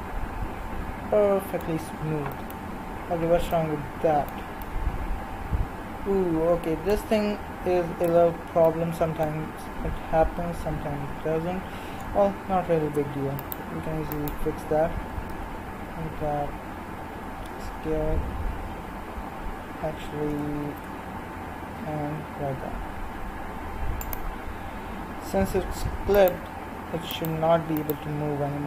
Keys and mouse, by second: 2.4-3.6 middle drag, 8.0 Tab, 13.3-17.2 right drag, 15.3 l, 17.2 s, 26.1-28.6 right drag.